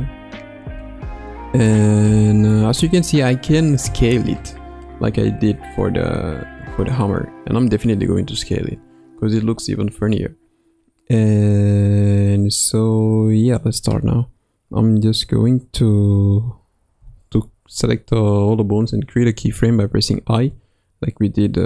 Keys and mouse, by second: 0.0 KP_3, 0.8 middle click, 2.5-2.9 middle drag, 5.1 s, 17.0 a, 20.4 i.